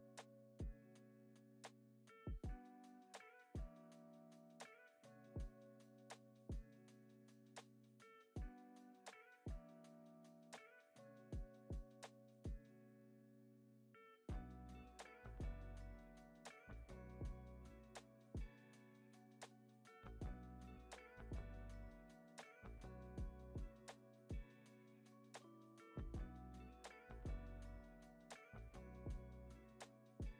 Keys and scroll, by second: 10.4 F9, 11.2 super+s, 12.1 space.